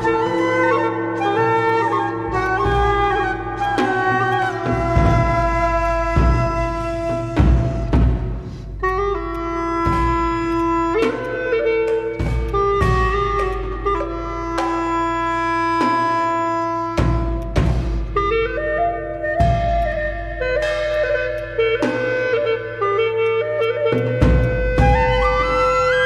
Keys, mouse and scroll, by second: 1.4 alt+middle click, 1.7 alt+click, 2.4 right click, 5.1 right click, 8.2 scroll up 1, 8.4 scroll down 1, 9.2-9.7 scroll down 1, 9.8 right click, 11.1 double click, 12.1 scroll down 1, 12.5 alt+click, 13.0 alt+scroll up 1, 13.5 alt+click, 19.8 shift+click, 20.9 shift+click, 21.3 alt+click, 22.8 ctrl+z, 23.2 shift+click, 24.4 shift+click, 24.8 alt+click.